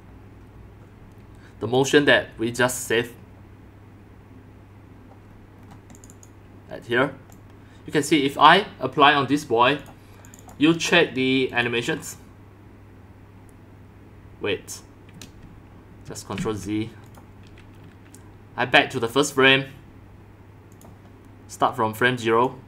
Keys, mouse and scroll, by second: 0.9 click, 1.8 click, 2.7 click, 5.2-5.6 scroll down 2, 5.6 scroll, 6.1 click, 6.2-8.0 drag, 10.2 click, 10.4 click, 11.5 click, 15.5 click, 16.3 ctrl+z, 17.0 click, 17.4 click, 19.0 click, 20.7 click, 21.1 drag, 22.1 drag, 22.4 click.